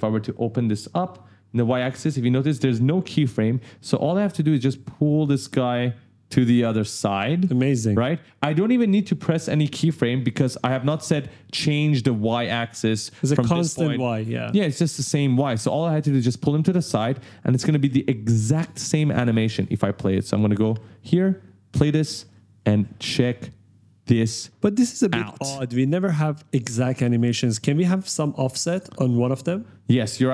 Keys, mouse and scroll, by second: 0.6-0.9 scroll down 1, 1.9 click, 2.2 scroll down 1, 4.5 click, 16.6-18.0 typing, 16.7 right click, 19.8 click, 20.4 right click, 20.4 w, 21.5 click, 21.8 space, 22.1 right click, 26.2 click, 26.8 space, 27.3 right click, 27.3 w, 29.0 click.